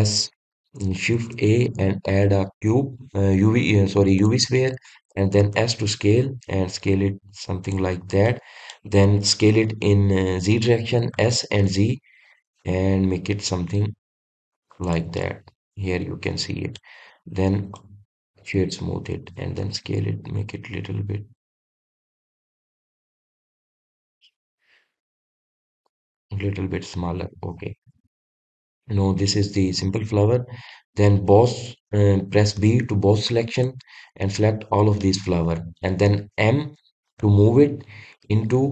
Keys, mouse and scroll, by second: 2.1 shift+a, 9.2-12.1 middle drag, 12.1 s, 15.8 drag, 16.1-18.2 middle drag, 18.2 click, 18.6-20.6 right drag, 20.6 s, 25.2 click, 25.9-26.7 scroll up 2, 26.7-28.5 middle drag, 28.5-29.0 scroll down 1, 29.0-32.0 middle drag, 36.0-38.2 middle drag, 38.2 m.